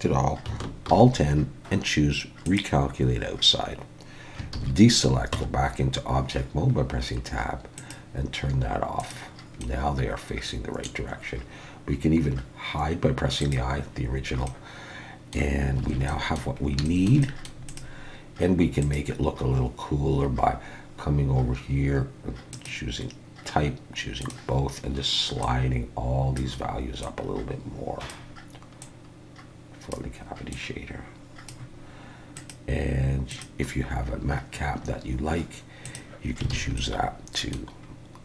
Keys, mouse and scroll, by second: 0.9 alt+n, 4.5 alt+a, 5.3 Tab, 7.8 click, 9.6 middle click, 13.4 click, 14.0-14.5 scroll down 1, 14.5 middle click, 15.8 alt+a, 16.1 middle click, 16.6 scroll up 3, 16.8 shift+middle click, 17.2 middle click, 17.7 click, 18.8 click, 36.5 alt+a, 36.8 middle click, 37.8-38.2 scroll down 2.